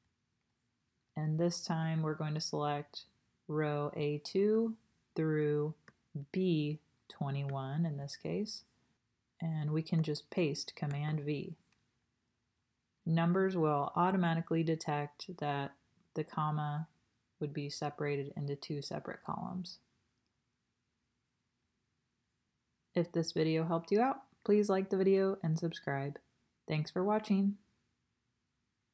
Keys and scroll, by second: 10.9 super+v.